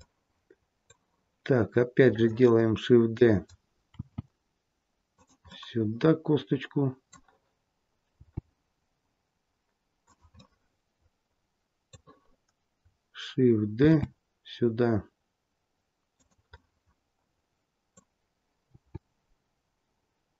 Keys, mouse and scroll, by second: 2.0 click, 2.8-3.3 scroll down 1, 3.8 shift+d, 5.4 middle click, 8.0 g, 10.2 middle click, 13.8 shift+d, 16.4 middle click, 18.6 g.